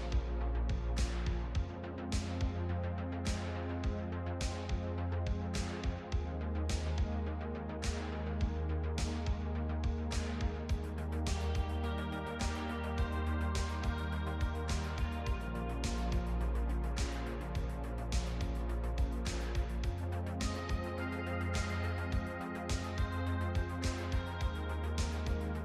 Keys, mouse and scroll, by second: 0.8 l, 8.5 g.